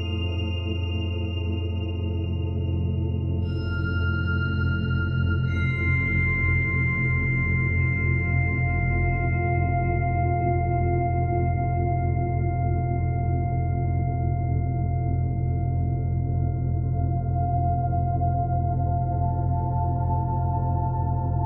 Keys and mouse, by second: 1.5 click, 3.8 click, 5.5 click, 6.7 click, 7.5 click, 9.3 a, 10.8 click, 11.6 click, 11.6 typing, 13.3-14.0 typing, 15.1-16.6 typing, 18.2 click.